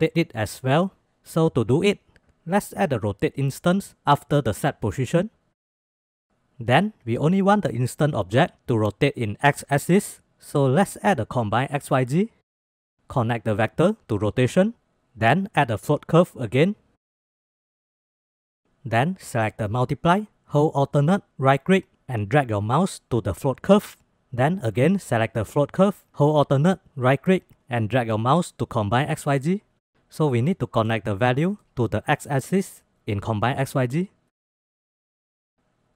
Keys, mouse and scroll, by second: 0.2 middle click, 0.6 click, 1.2 shift+a, 5.1 click, 5.3 click, 5.6 click, 5.9 middle click, 6.1 middle click, 10.3 shift+a, 13.3-14.0 drag, 15.1 middle click, 15.3 middle click, 15.6 click, 16.1 shift+a, 18.7 middle click, 20.4-22.9 alt+drag, 23.5 middle click, 25.3-26.0 drag, 26.9-29.7 alt+drag, 30.3-30.7 middle drag, 31.2 middle click, 32.1 middle click, 32.5-33.5 drag, 34.4 middle click, 34.6 middle click, 35.0 middle click.